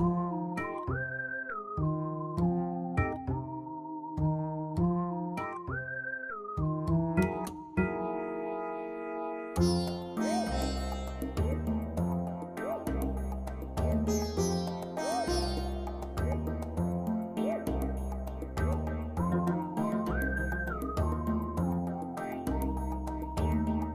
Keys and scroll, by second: 0.4 ctrl+v, 7.0 ctrl+v.